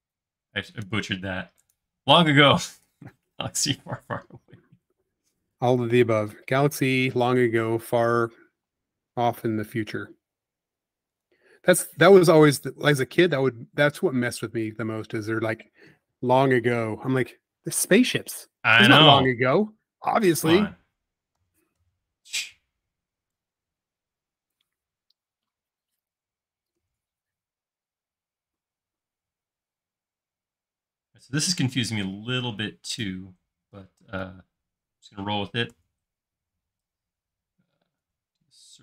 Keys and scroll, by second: 2.3 space, 8.5 m, 11.7 space, 21.4 8, 21.8 Return, 35.7 x, 38.0 c.